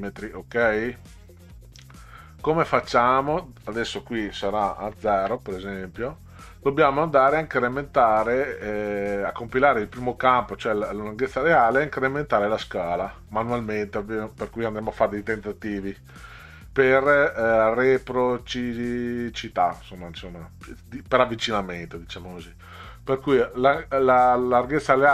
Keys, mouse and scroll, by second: 4.9 ', 5.1 KP_Enter, 9.6 click.